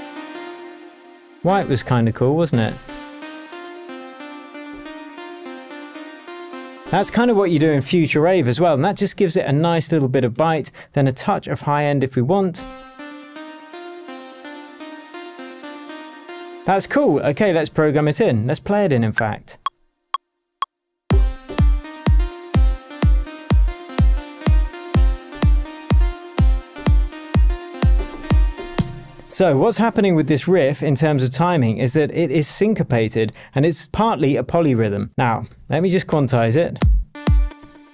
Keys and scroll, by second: 28.7 space, 32.4 super+a, 35.4 shift+super+u, 36.0 shift+super+Return, 36.5 Return, 36.7 space.